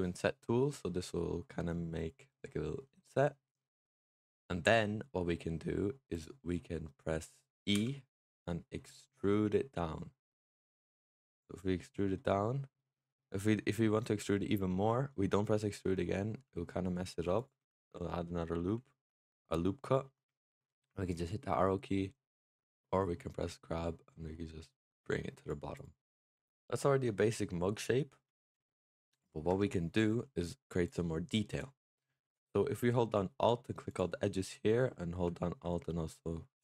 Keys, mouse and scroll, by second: 6.7 middle click, 7.6 e, 11.5 middle click, 12.1-12.6 scroll up 2, 12.6-16.2 middle drag, 16.2 e, 17.6 ctrl+z, 18.8-21.0 middle drag, 21.0 click, 25.6 click, 26.1-26.5 middle drag, 26.5-27.0 scroll down 4, 27.0-28.1 middle drag, 28.1-28.5 scroll up 3, 28.5-29.0 middle drag, 29.0 click, 29.4 Tab, 30.7 click, 31.3-31.7 scroll up 2, 31.7-33.8 middle drag, 33.8 alt+click, 34.3 scroll up 1, 34.5-36.6 middle drag.